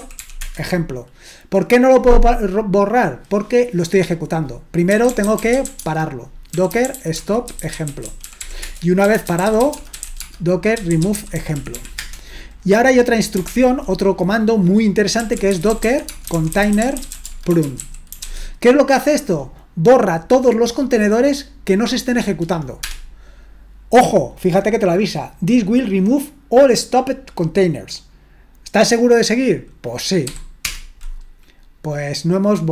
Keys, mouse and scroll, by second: 0.0-0.7 typing, 4.7-12.3 typing, 13.5 ctrl+l, 15.0-18.7 typing, 22.8 Return, 30.6 typing.